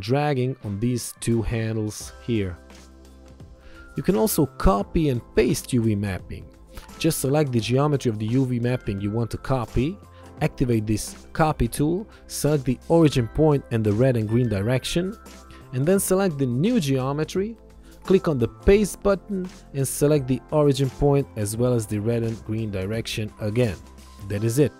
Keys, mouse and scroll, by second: 4.4 ctrl+1, 7.4 click, 11.8 click, 15.6 ctrl+1, 16.0 click, 22.9 ctrl+1.